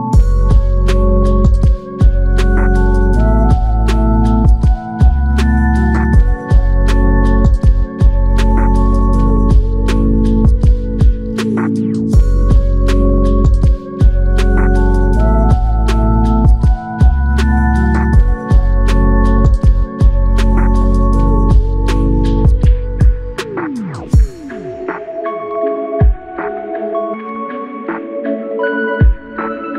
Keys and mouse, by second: 0.9 alt+click, 10.8 alt+click, 13.3 alt+click, 14.4 ctrl+click, 16.8 ctrl+click, 20.1 w, 22.7 alt+click, 26.8 ctrl+click, 28.1 q.